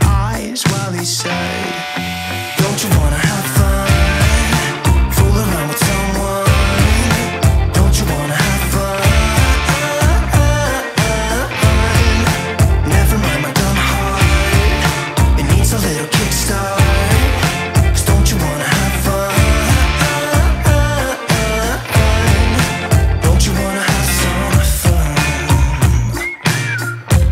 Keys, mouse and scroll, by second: 2.3 scroll up 1, 4.7-8.0 drag, 8.0 middle click, 9.7-10.0 scroll down 1, 10.2 scroll up 1, 10.4-10.7 scroll down 1, 10.7-11.1 scroll up 1, 11.7 click, 13.1 scroll up 1, 14.4-14.7 scroll down 1, 15.5-20.3 drag, 20.3 scroll up 1, 22.1-26.3 drag, 26.3 middle click.